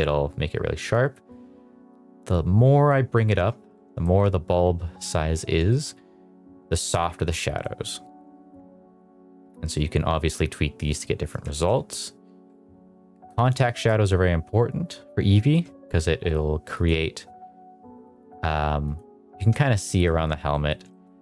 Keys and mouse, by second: 1.2-2.8 drag, 3.9 shift+middle drag, 5.6 shift+middle drag, 6.6-7.6 drag, 8.5-10.7 drag, 11.4 shift+middle drag, 13.4 click, 15.4 shift+middle click, 16.6 click, 18.1 click, 18.7 click, 19.3 shift+middle click, 19.8 middle click, 20.4 middle click, 20.8 shift+middle drag, 21.1 middle click.